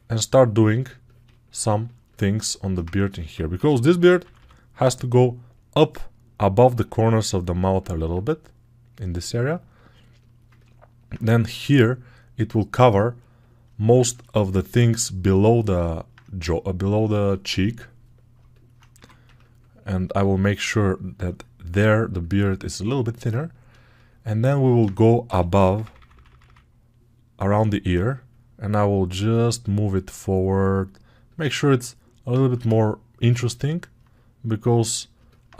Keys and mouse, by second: 3.4 g, 4.1 ], 4.2 ], 18.8 2, 25.1 g, 25.5 [, 25.7 [.